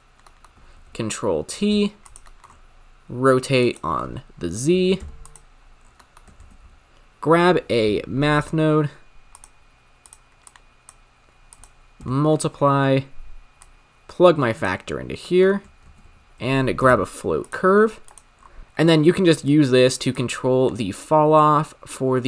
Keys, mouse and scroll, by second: 0.3 middle click, 0.7 ctrl+t, 1.7 g, 2.4 middle click, 2.5-5.2 scroll up 7, 5.2 click, 5.8 scroll down 7, 6.0 middle click, 6.5 shift+a, 10.5 click, 11.5-12.3 drag, 12.3 scroll up 6, 13.5-13.9 drag, 15.3 middle click, 15.4-15.8 scroll up 1, 15.8 shift+a, 18.4-21.0 scroll up 2, 21.0-22.2 drag.